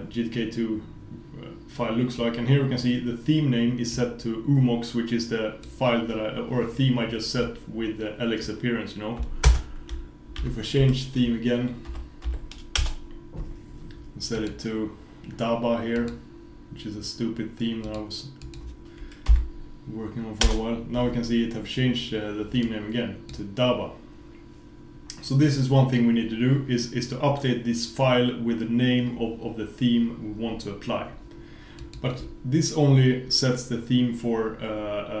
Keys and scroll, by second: 9.5 super+space.